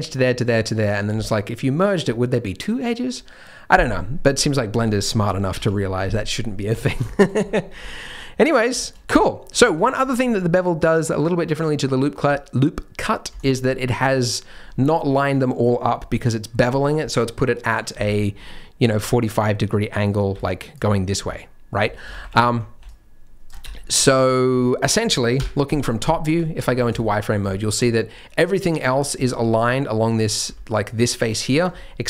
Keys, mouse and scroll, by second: 4.0-4.4 scroll down 2, 4.4 click, 5.6 Tab, 6.5-7.0 scroll down 7, 7.0 shift+middle click, 7.3-7.8 scroll up 2, 7.6 Tab, 7.8 middle click, 8.4 middle click, 8.8 shift+middle click, 9.6 shift+middle click, 9.7-10.0 scroll up 2, 12.2-13.2 scroll up 3, 13.3 alt+click, 14.0-15.2 scroll down 1, 15.2-16.3 scroll down 2, 18.1-20.2 scroll up 6, 20.2 middle click, 20.3-23.4 typing, 20.8 click, 21.3 click, 22.1 ctrl+z, 22.2 ctrl+z, 22.8 right click, 23.6 Tab, 23.7-24.2 scroll down 4, 24.0 middle click, 24.2 Tab, 24.4 scroll up 3, 25.3 KP_7, 25.9-26.3 scroll down 1, 26.3 z, 26.7 scroll down 3, 27.0 shift+middle click, 27.4 shift+middle click, 27.7-28.3 scroll down 1, 28.3-28.9 scroll down 1, 28.9 scroll down 2, 29.2 shift+middle click, 30.4 b, 31.5-31.9 scroll down 2.